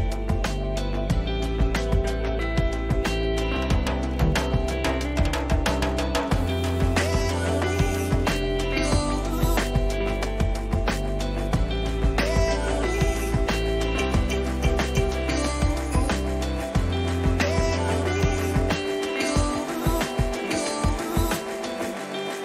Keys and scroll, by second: 14.6 Down, 18.3 Up.